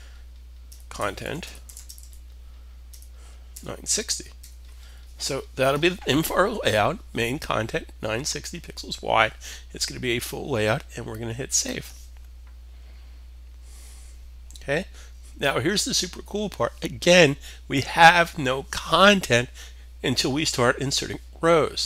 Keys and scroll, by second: 0.0-4.3 typing.